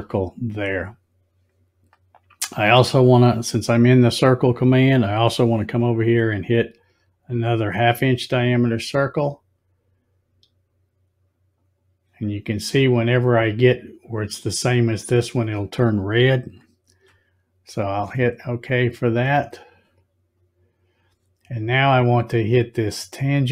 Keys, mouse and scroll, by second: 7.8-11.5 drag, 19.1 click.